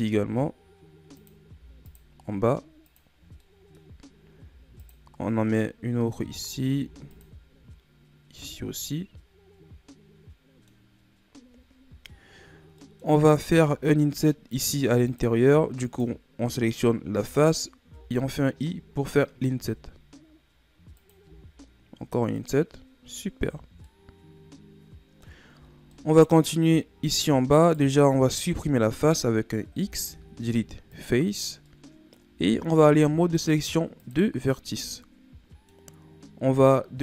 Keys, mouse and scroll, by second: 1.5 ctrl+r, 3.1 scroll down 4, 3.4 middle click, 3.9-4.4 scroll up 2, 4.4 ctrl+r, 6.7 ctrl+r, 8.7 scroll down 1, 8.9-10.9 middle drag, 10.9-11.2 scroll up 2, 12.8 middle click, 13.4 ctrl+Tab, 15.9 right click, 17.9 i, 19.5 i, 23.0-23.3 scroll down 2, 23.3 Tab, 23.8-25.5 middle drag, 25.5 Tab, 25.9 middle click, 26.5-27.5 scroll up 1, 27.5-28.6 right drag, 28.6-29.7 middle drag, 29.7 x, 31.6-32.7 middle drag, 32.7 ctrl+Tab, 34.7-37.0 middle drag.